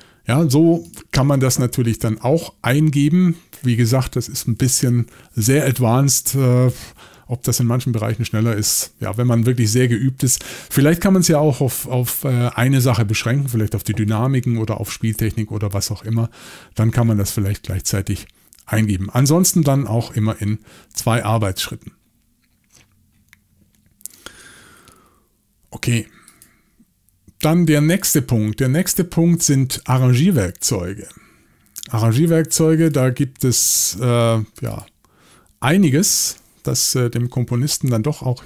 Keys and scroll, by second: 0.2 Escape.